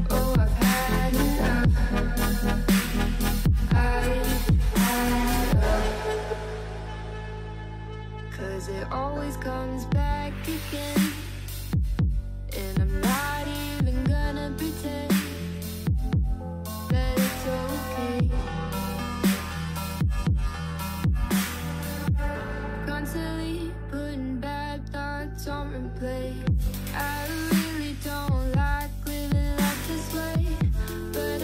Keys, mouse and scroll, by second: 0.6-2.2 drag, 3.1 click, 3.6 click, 4.0 click, 4.4 click, 4.9 click, 6.8-7.5 middle drag, 7.5 KP_3, 8.4-9.5 scroll up 1, 9.5 x, 11.9-14.7 drag, 16.1 Tab, 17.3 r, 19.1 scroll up 1, 20.1 alt+z, 21.3 s, 22.1 shift+middle click, 22.4 scroll up 2, 22.7 shift+middle click, 23.6 s, 24.7 g, 25.9 s, 26.8 g, 27.9 click, 28.3 g, 30.5 e.